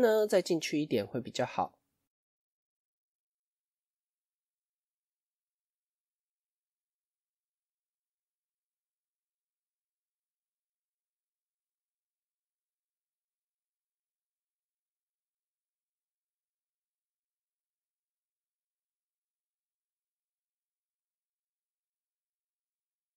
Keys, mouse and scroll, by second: 0.4-1.8 middle drag, 1.8-2.7 scroll up 1, 2.7 Tab, 3.1-5.7 middle drag, 5.7 click, 6.2-7.3 middle drag, 7.3 click, 8.1 middle click, 8.9 shift+click, 9.4-10.8 middle drag, 10.8 shift+click, 11.2-12.4 middle drag, 12.4 shift+click, 12.7-14.1 middle drag, 14.1 shift+click, 14.4-15.9 middle drag, 15.9 shift+click, 16.3-17.4 middle drag, 17.4 shift+click, 17.7-20.2 middle drag, 20.2 shift+click, 20.6-22.4 middle drag, 22.4 shift+click, 22.8-23.1 middle drag.